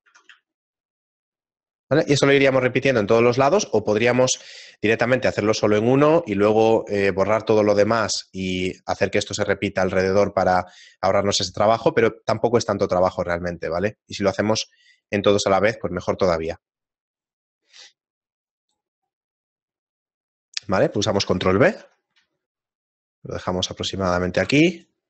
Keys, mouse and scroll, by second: 0.7 Tab, 0.7 shift+middle click, 0.7-1.5 scroll down 3, 2.3 Tab, 2.9 shift+middle click, 4.4 middle click, 4.9 shift+middle click, 6.0 shift+middle click, 8.4 middle click, 8.4-9.3 scroll down 2, 10.8 shift+middle click, 11.9 middle click, 11.9-13.1 scroll up 2, 13.1 shift+right click, 13.1-13.9 scroll up 2, 13.9 shift+middle click, 14.4 middle click, 15.2 shift+right click, 15.5 middle click, 16.8 shift+right click, 17.2 shift+right click, 17.3 shift+middle click, 18.7 shift+right click, 19.1 shift+middle click, 21.7 ctrl+b, 21.7 shift+middle click, 24.4 ctrl+Tab.